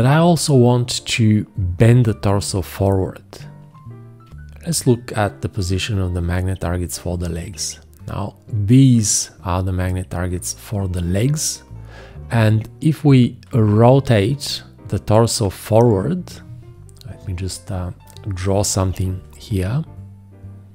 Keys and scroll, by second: 4.3 v, 18.8 b.